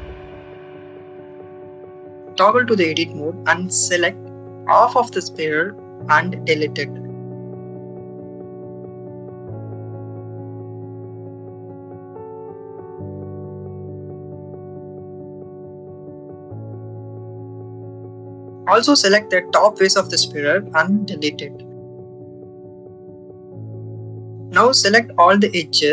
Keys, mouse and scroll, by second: 3.3 Tab, 3.8 click, 5.2 click, 7.6 click, 8.5 ctrl+z, 9.7 click, 10.1 click, 10.7 click, 12.0 Delete, 13.5 click, 14.7 click, 16.5 click, 17.8 click, 19.4 click, 20.4 Delete, 22.4 2, 23.9 alt+click.